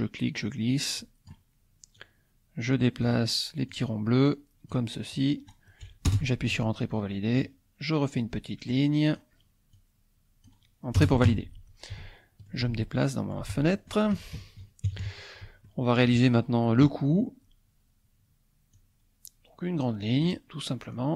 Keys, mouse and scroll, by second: 0.0-1.5 drag, 2.0-3.5 drag, 3.8-5.0 drag, 6.1 Return, 7.5 click, 8.7-10.6 drag, 11.0 Return, 12.0 shift+click, 12.8 shift+click, 13.6 shift+click, 14.4 shift+KP_Subtract, 15.7 shift+click, 16.3-18.0 shift+middle drag, 18.8-20.4 drag, 21.0-21.1 drag.